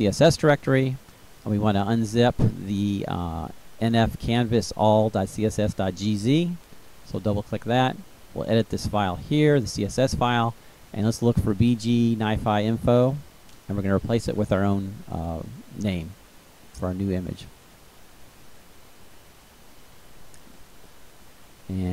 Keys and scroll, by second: 14.9 b, 15.2 g, 17.1 i, 18.6-19.7 typing.